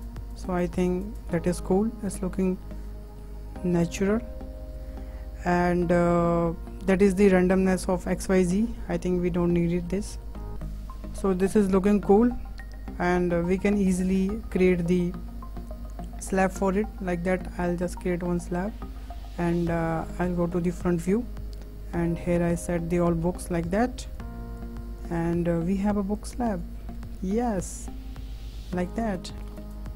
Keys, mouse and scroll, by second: 1.7-2.7 middle drag, 2.7-3.0 scroll up 2, 3.0-6.4 shift+middle drag, 9.4 scroll down 1, 9.7 shift+middle click, 10.1 scroll up 1, 10.3-11.1 shift+middle drag, 11.1-11.6 scroll up 5, 11.6-12.3 middle drag, 12.3-12.6 scroll down 3, 12.6-14.1 middle drag, 14.1-15.3 scroll up 3, 15.4-15.9 scroll down 4, 15.9-17.3 middle drag, 17.3 click, 17.9 scroll down 2, 18.0 middle click, 18.7-19.8 scroll up 4, 19.8 `, 19.9 `, 21.2 click, 22.4 w, 22.6 w, 23.1 click, 24.6 click, 25.2-26.2 middle drag, 26.2 click, 26.8 middle click, 27.2 `, 27.4 `, 28.2 scroll down 5, 28.6-29.0 scroll up 4, 29.0-29.3 shift+middle drag, 29.3 scroll down 1, 29.4 shift+right click, 29.5 shift+a, 29.5 shift+a.